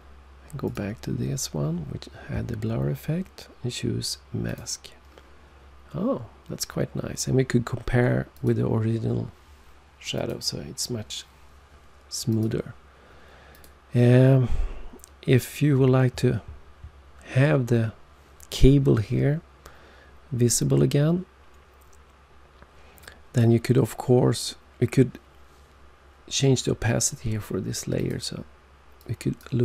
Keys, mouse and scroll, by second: 0.6 click, 4.4 click, 8.3 click, 10.1 click, 12.2 click, 13.4 click, 27.9 click, 28.9 click.